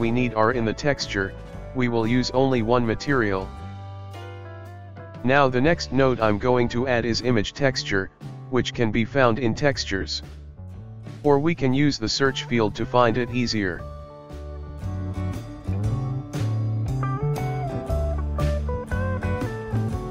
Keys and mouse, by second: 0.2-3.1 shift+middle drag, 3.8 shift+a, 9.1 shift+a.